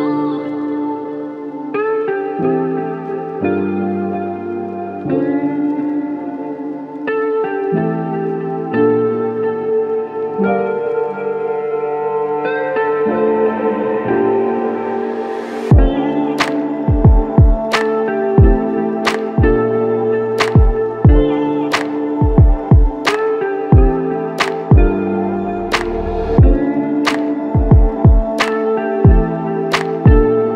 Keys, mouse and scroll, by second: 3.4 alt+click, 4.3 alt+click, 5.4 alt+click.